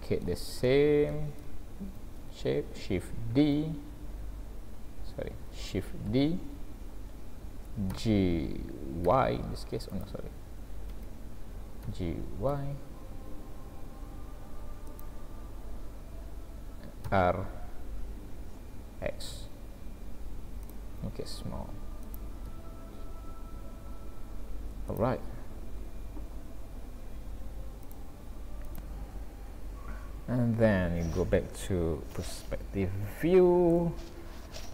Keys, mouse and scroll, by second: 0.7 shift+middle click, 3.3 d, 5.3 Escape, 6.1 shift+d, 11.8 g, 17.1 r, 21.1 s, 22.5 g, 25.3-26.0 scroll down 3, 29.4 scroll down 3, 30.0-31.3 scroll up 4, 32.1 ctrl+alt+q, 33.2 shift+middle click.